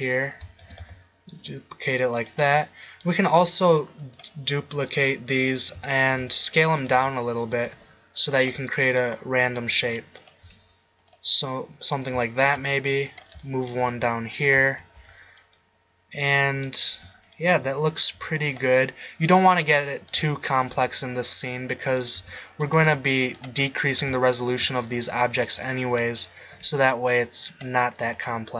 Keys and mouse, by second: 0.1 click, 0.6 shift+d, 2.6 middle drag, 6.1 shift+d, 7.0 s, 7.7 g, 10.4 s, 12.4 shift+d, 13.8 g, 16.9 s, 18.1 s, 18.4-19.0 drag, 18.6 g, 20.6 shift+d, 22.2 s, 22.9 g, 24.5 shift+d, 26.6 g.